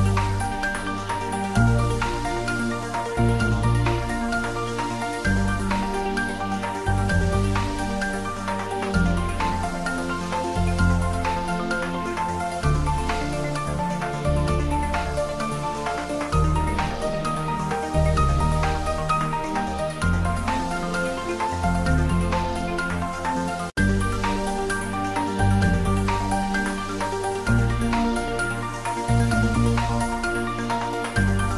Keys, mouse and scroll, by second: 2.3 click, 2.5-2.8 scroll down 1, 2.8-4.5 middle drag, 4.5 scroll up 1, 5.5 click, 6.1 3, 6.3 click, 7.0 shift+click, 8.5-9.5 scroll down 1, 10.3 click, 11.3 e, 14.5 click, 14.8 ctrl+z, 15.3 scroll up 1, 15.6 ctrl+z, 17.2 ctrl+r, 19.4 click, 19.8 s, 19.9 z, 21.5 click, 21.9 scroll down 1, 22.1 middle click, 22.5 scroll up 1, 23.0 click, 23.5 3, 23.6 click, 23.9 shift+click, 24.8 scroll down 1, 25.0 middle click, 25.7 e, 27.8 click, 28.1 middle click, 29.2 Tab, 29.7 scroll down 1, 30.0-31.5 middle drag.